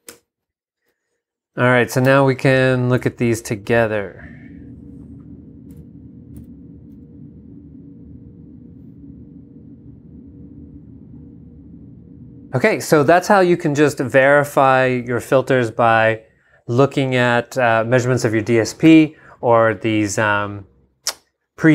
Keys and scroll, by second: 0.1 Return, 2.1 g, 2.9 super+g, 3.0 super+Tab, 6.4 super+v.